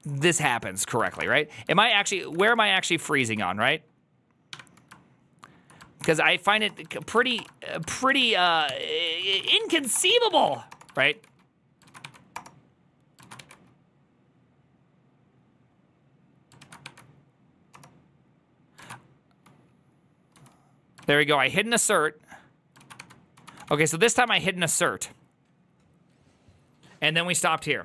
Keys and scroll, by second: 0.0-1.7 typing, 1.6 Return, 1.6 ctrl+a, 2.0 ctrl+c, 2.1 ctrl+c, 2.3 Up, 3.1 Return, 3.1 ctrl+a, 4.4 1, 5.9 ctrl+h, 6.0-13.2 typing, 13.1 ctrl+a, 16.6 ctrl+a, 17.8 Return, 17.8 1, 18.7 ctrl+a, 20.2 j, 20.9 ctrl+a, 21.1 2, 22.6-24.6 typing.